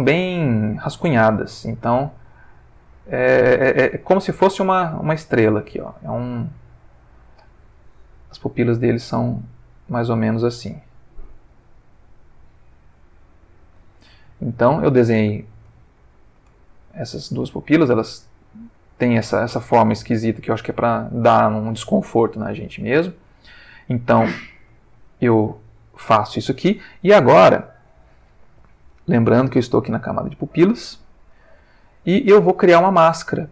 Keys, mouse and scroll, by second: 2.0-5.8 drag, 6.3 click, 8.8-13.7 drag, 14.3 ctrl+middle click, 15.3 ctrl+middle click, 16.6 ctrl+middle click, 17.2-18.9 ctrl+middle drag, 19.8 click, 21.0 click, 22.4 ctrl+middle click, 23.2 ctrl+middle click, 24.5-25.5 ctrl+middle drag, 29.1 click, 30.6 click, 31.0 click.